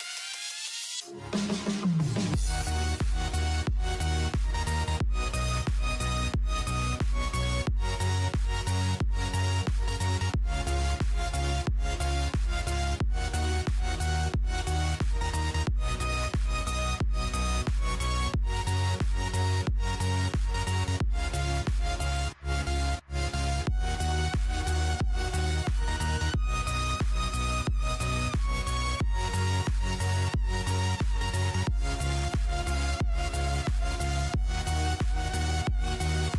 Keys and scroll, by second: 2.1-6.0 typing, 13.4-15.3 typing, 18.3-19.2 typing, 22.3-23.2 typing, 25.1-28.5 typing, 30.0-31.9 typing, 35.2-36.3 typing.